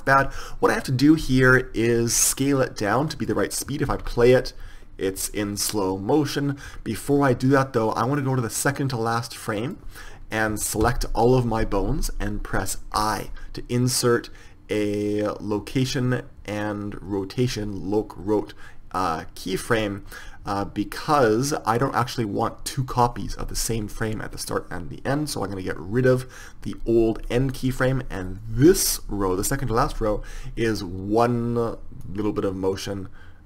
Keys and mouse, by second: 2.9 click, 4.2 alt+a, 7.0 Escape, 10.8 a, 11.1 a, 32.3-33.4 drag.